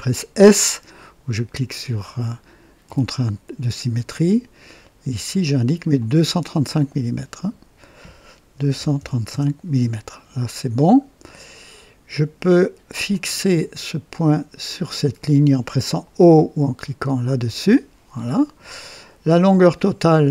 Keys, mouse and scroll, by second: 2.8 s, 5.9 click, 7.3 click, 8.5 KP_2, 8.7 KP_3, 8.9 KP_5, 9.1 KP_5, 9.2 Return, 13.0 click, 15.1 click, 17.4 o, 18.3-18.8 right drag, 20.2 click.